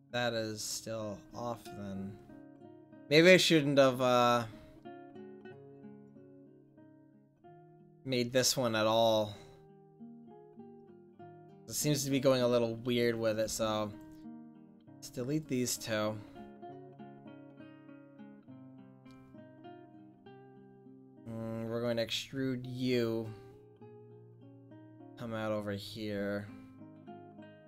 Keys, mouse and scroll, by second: 5.4-6.6 middle drag, 12.2-13.4 right drag, 13.4 x, 14.2-15.7 right drag, 14.4 x, 15.7 click, 15.9 click, 16.1 click, 17.3 click, 17.5 click, 17.7 click, 17.8-20.2 middle drag, 23.4 middle click, 23.9 e.